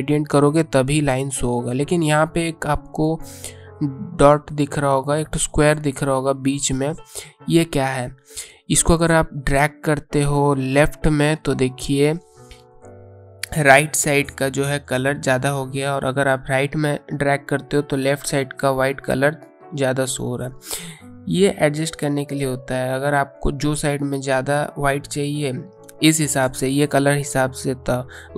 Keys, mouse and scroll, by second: 8.2 click.